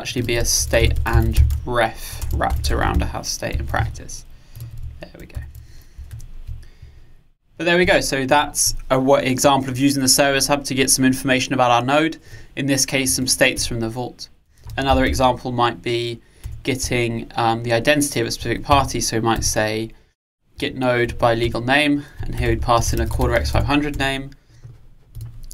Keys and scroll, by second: 6.2 alt+Return, 16.5 Return.